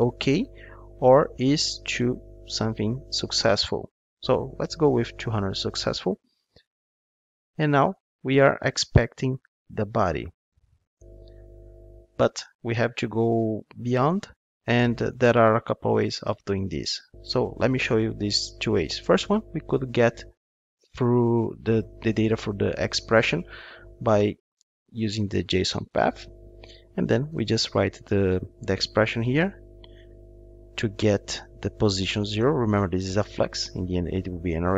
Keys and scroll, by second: 4.6 Return, 7.8 Return, 10.9 Return, 25.4 Return.